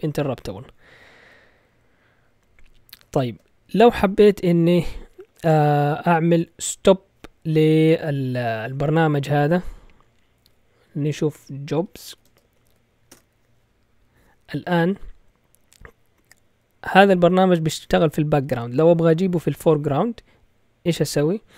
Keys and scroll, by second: 3.0 ctrl+l, 11.1-13.1 typing.